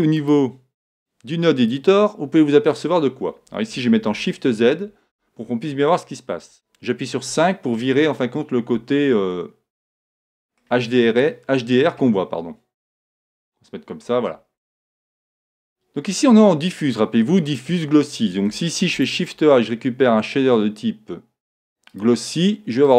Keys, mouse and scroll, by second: 0.2-2.1 drag, 4.0 shift+z, 7.3 KP_5, 9.3 middle click, 9.6 middle click, 12.8 middle click, 13.4 middle click, 15.0 middle click, 16.7-18.6 drag, 19.0 shift+a.